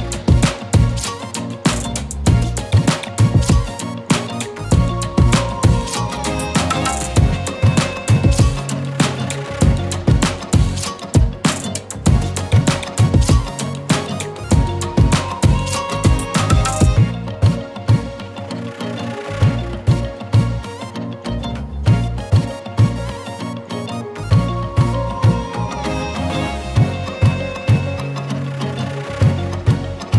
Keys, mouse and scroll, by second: 1.9-3.7 typing, 2.1 click, 2.5 click, 3.1 click, 8.6-13.6 drag, 13.8 shift+click, 18.1-19.3 drag, 25.1 alt+click, 26.5-27.2 scroll down 1, 27.6 shift+click, 29.3 z, 29.4 click, 29.7 space, 29.8 click.